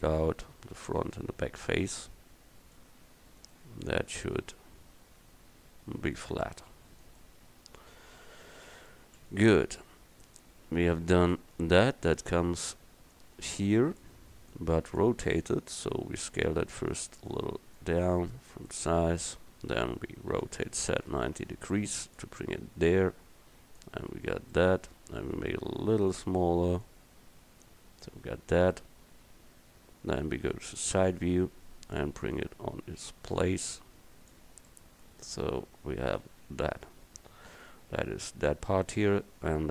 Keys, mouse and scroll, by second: 3.4 middle click, 4.6 middle click, 7.6 Tab, 10.1 KP_1, 15.6 s, 20.4 r, 25.3 s, 31.1 KP_3, 32.4-34.2 drag, 34.9-35.6 middle drag, 35.6 KP_1, 36.6 a.